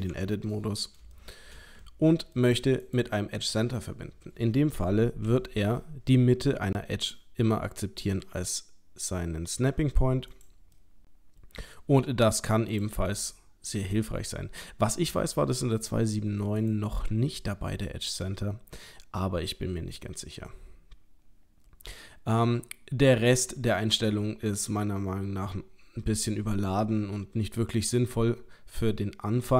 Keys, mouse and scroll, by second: 0.1 Tab, 0.4 middle click, 1.2 shift+middle click, 1.8 ctrl+middle click, 2.8 click, 5.3 g, 10.8 middle click, 11.8 g, 13.1 middle click, 16.6 click, 27.8 middle click.